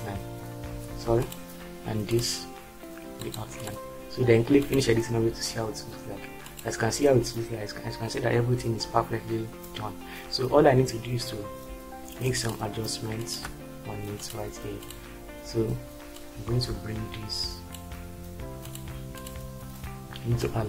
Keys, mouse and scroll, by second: 0.8 ctrl+z.